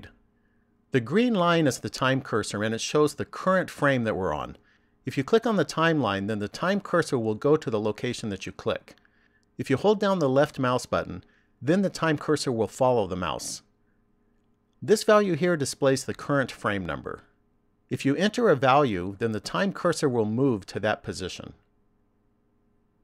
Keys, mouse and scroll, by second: 6.4 click, 12.0 click, 17.7 click.